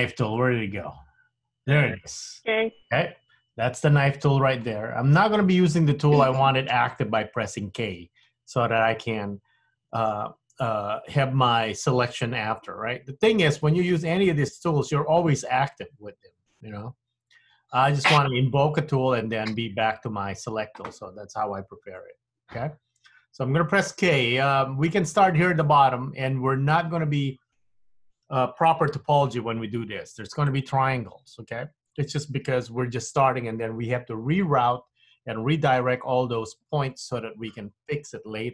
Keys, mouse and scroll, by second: 0.5 click, 22.1 middle click.